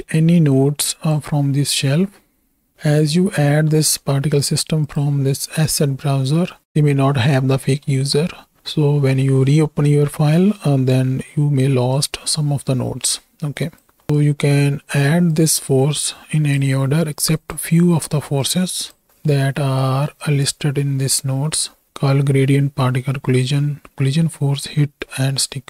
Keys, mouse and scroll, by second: 0.1-1.1 drag, 3.6-4.1 middle drag, 4.8-6.6 drag, 7.6 middle click, 11.9-13.8 drag, 14.3 click, 15.5-16.5 drag, 17.3 click, 18.4 click, 19.1 middle click, 19.5 middle click, 20.8 middle click.